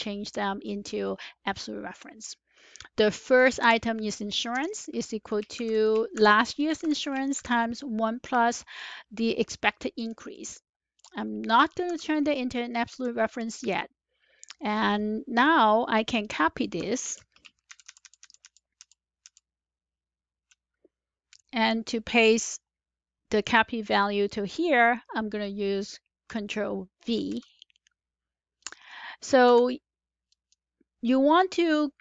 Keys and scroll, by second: 4.5 Left, 5.5-7.3 typing, 11.8-12.8 typing, 16.9 Up, 16.9 ctrl+c, 17.6 shift+Down, 17.8 shift+Down, 27.0 ctrl+v, 29.4 Escape.